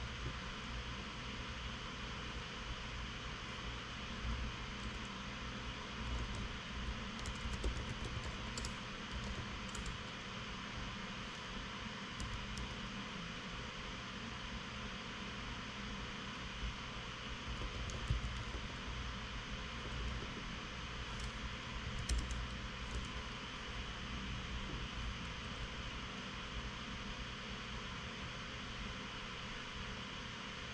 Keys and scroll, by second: 0.3 Escape, 0.5 Escape, 0.7 Escape, 4.8 c, 5.0 c, 5.4 Tab, 6.4-10.5 typing, 12.8 Return, 13.2 Return, 15.1 typing, 17.8-20.7 typing, 22.2 Down, 22.5 Down, 22.7 Return, 23.6 Tab, 26.1 super+x.